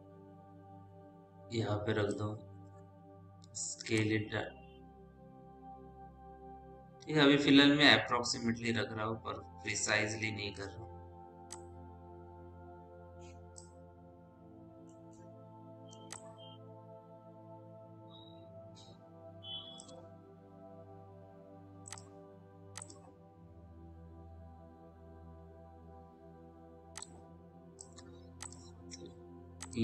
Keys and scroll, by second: 2.7 r, 11.1 w.